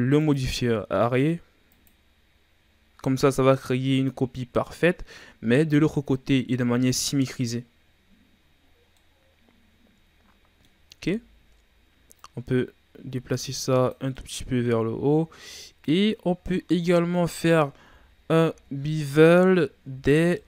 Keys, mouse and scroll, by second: 2.1-3.3 drag, 3.4-6.5 scroll up 2, 7.6-8.5 scroll down 1, 8.5-8.9 scroll up 1, 8.9-11.1 middle drag, 11.1 Tab, 12.1-14.1 drag, 14.1-15.2 middle drag, 15.2-15.5 scroll down 3, 15.5 middle click, 15.9-16.5 scroll up 2, 16.5-17.7 middle drag, 17.7 KP_Divide, 18.4 z, 20.0 Tab, 20.3-20.4 middle drag.